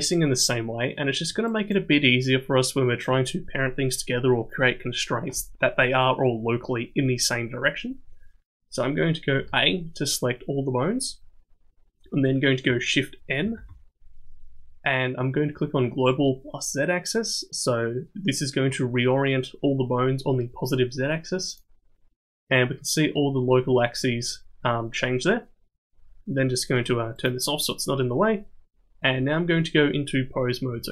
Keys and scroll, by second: 9.4 a, 13.4 shift+n.